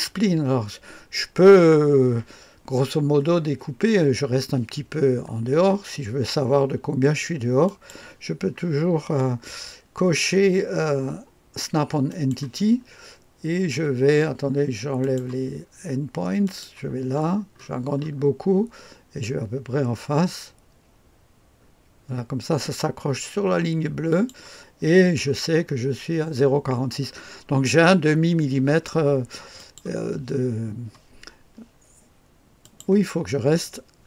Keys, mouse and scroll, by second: 0.1-7.7 scroll up 1, 7.7 click, 12.1 click, 15.0 click, 16.4 click, 17.1-24.1 scroll up 1, 24.1 click, 24.8-29.6 scroll down 1, 29.6 click, 31.2-32.6 scroll down 1, 32.6 click.